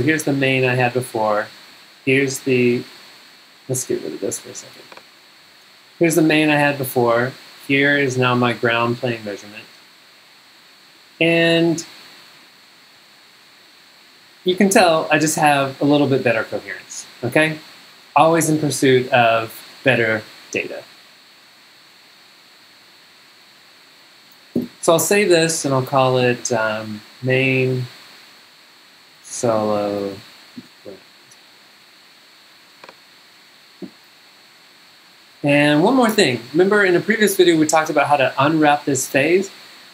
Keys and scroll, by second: 1.7 z, 5.4 z, 7.1 z, 13.0 z, 14.7 z, 18.7 z, 22.7 z, 24.6 space, 26.4 shift+m, 27.4 shift+space, 28.9-30.6 typing.